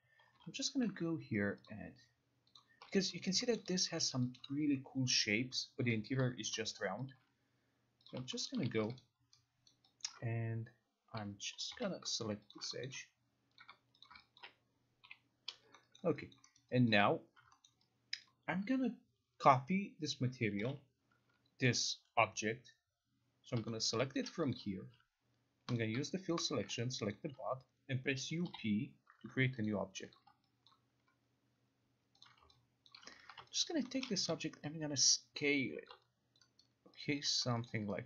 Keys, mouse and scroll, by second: 0.1-1.0 typing, 1.8 click, 2.7 click, 3.1 alt+click, 3.4 alt+middle click, 3.7 alt+right click, 3.7 alt+scroll, 4.3 alt+click, 5.6 alt+click, 5.9 alt+click, 6.1 alt+click, 6.9 alt+middle click, 6.9 alt+right click, 7.3 alt+click, 8.2 click, 8.6 middle click, 8.7 p, 9.1 alt+right click, 9.8 alt+right click, 10.1 alt+click, 11.4-12.4 typing, 12.7 shift+click, 12.9 alt+middle click, 13.7 click, 14.2 shift+click, 14.5 alt+click, 15.1 Delete, 16.1 alt+middle click, 16.5 alt+click, 16.7 alt+middle click, 17.5 alt+click, 17.5 alt+right click, 17.7 alt+middle click, 18.4 alt+click, 18.4 alt+middle click, 20.7 u, 24.0 alt+middle click, 24.3 alt+click, 24.7 click, 25.9 click, 26.6 shift+click, 27.2 alt+click, 28.3 u, 28.6 Up, 29.7 click, 30.3 click, 30.8 alt+click, 31.0 alt+click, 32.4 click, 33.0 alt+click, 33.3 ctrl+a, 33.8 alt+click, 34.1 alt+middle click, 34.4 t, 36.0 click, 36.5 alt+click, 36.7 alt+right click, 37.7 alt+middle click, 37.8 alt+middle click.